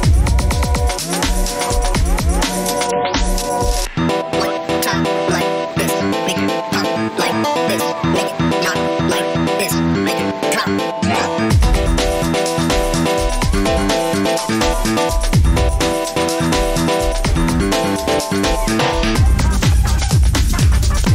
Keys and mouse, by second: 9.8 middle click.